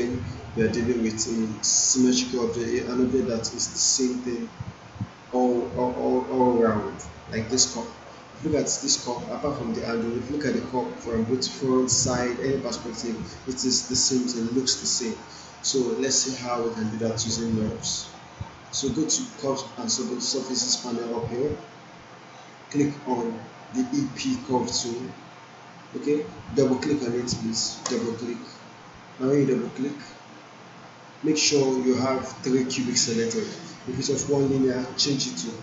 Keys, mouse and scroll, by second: 16.9 click, 27.9-31.6 drag, 34.1 click.